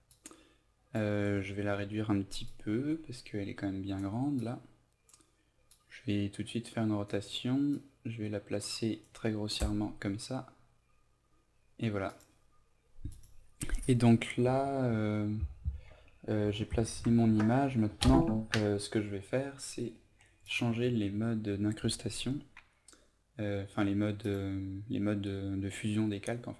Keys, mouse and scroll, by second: 4.3-9.2 drag.